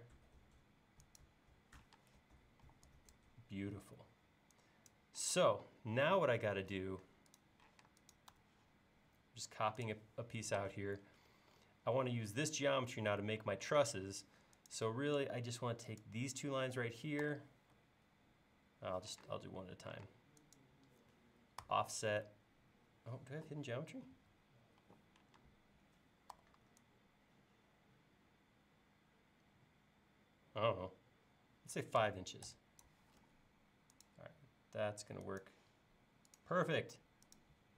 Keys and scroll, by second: 1.9 space, 2.6 e, 5.3 space, 7.8 m, 12.9 l, 17.2 f, 19.2 space, 21.6 f, 24.8 e, 25.4 space, 32.0 5, 32.5 Return, 33.2 l.